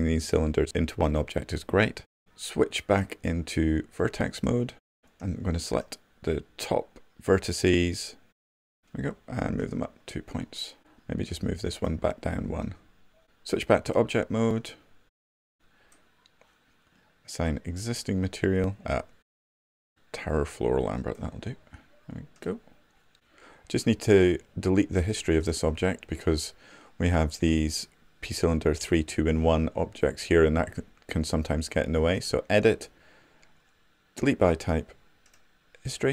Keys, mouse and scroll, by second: 3.1-6.1 right drag, 10.3 w, 16.0-19.0 right drag.